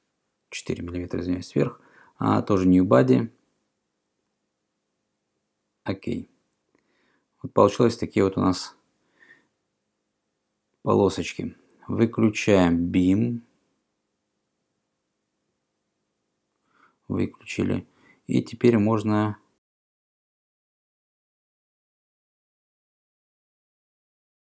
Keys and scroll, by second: 21.2 e.